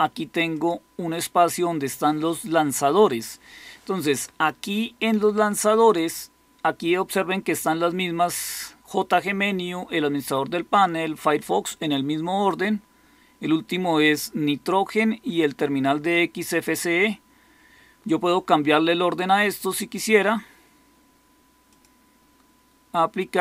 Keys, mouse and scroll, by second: 0.6 click.